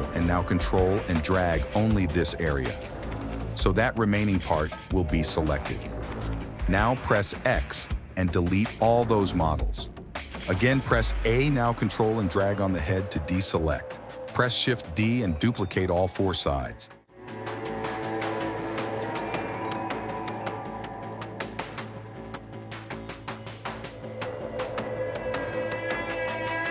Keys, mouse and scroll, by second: 0.2 a, 1.3-2.7 ctrl+drag, 3.5-5.2 ctrl+drag, 7.9 x, 9.7 a, 10.6-11.0 ctrl+drag, 12.1 ctrl+click, 13.7 shift+d, 17.6 click, 18.8 click, 19.2 ctrl+z, 19.4 r, 20.1 g, 21.0 r, 21.7 g, 22.7 a, 22.9 ctrl+click, 23.2 ctrl+click, 23.6 shift+d, 24.2 click, 24.6 g, 26.2 click, 26.2 middle click.